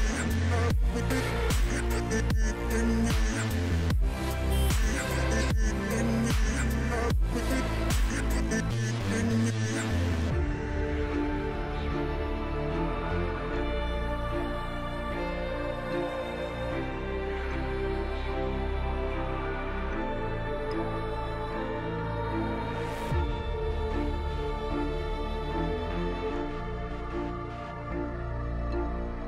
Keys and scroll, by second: 7.6 ctrl+r, 11.4 ctrl+shift+a, 14.4 g, 28.2 Delete.